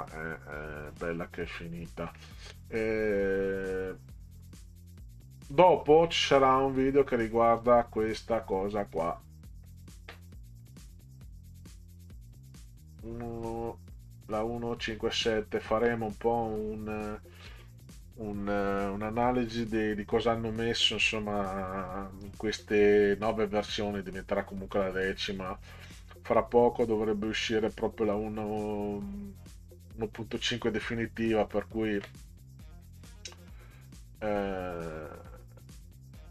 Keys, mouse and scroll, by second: 0.0 scroll up 2, 0.1-2.0 middle drag, 5.6 click, 7.2 click, 8.9 click, 10.6 click, 12.0 click, 15.7 click, 21.9-22.4 drag.